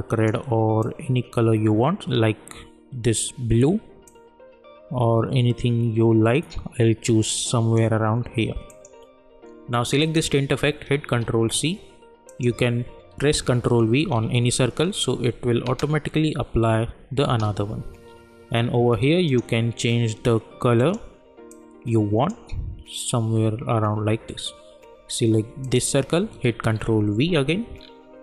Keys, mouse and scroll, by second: 11.2 ctrl+c, 12.3 click, 14.0 ctrl+v, 15.6 space, 18.0 scroll down 1, 19.3-23.0 drag, 25.6 click, 26.8 ctrl+v, 27.8-28.2 scroll down 1.